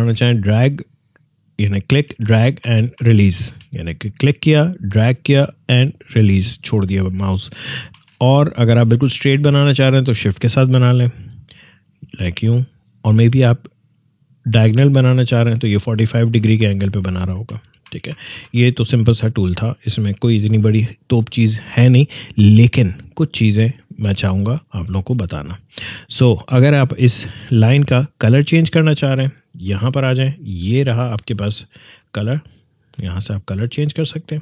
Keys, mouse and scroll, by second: 2.2 ctrl+z, 3.9-7.9 drag, 7.9 ctrl+z, 9.2-17.8 shift+drag, 17.8 ctrl+z, 22.2 alt+scroll up 1, 24.0-24.7 alt+scroll down 1, 24.8 alt+scroll up 1, 26.6 scroll up 1.